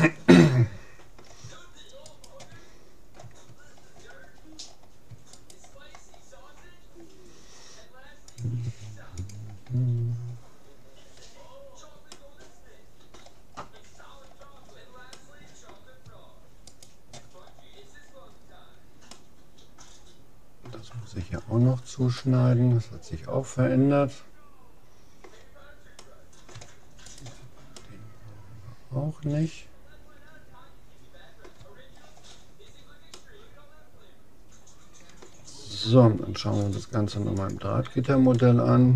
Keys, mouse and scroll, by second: 2.2-3.8 right drag, 3.8-7.2 middle drag, 5.4-7.0 right drag, 7.8 middle click, 8.4-9.9 drag, 9.8-11.0 middle drag, 12.2-20.8 middle drag, 16.8-18.4 right drag, 22.2-23.8 middle drag, 26.0-29.4 middle drag, 27.2-28.8 right drag, 32.0-34.8 middle drag, 36.6-38.4 drag, 38.4-38.9 middle drag.